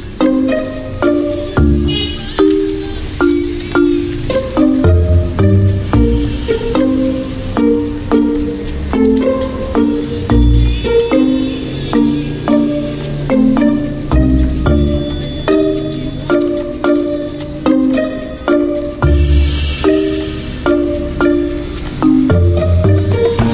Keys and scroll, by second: 5.2 ctrl+f, 7.4 ctrl+shift+[, 9.1 ctrl+shift+], 11.1 Escape.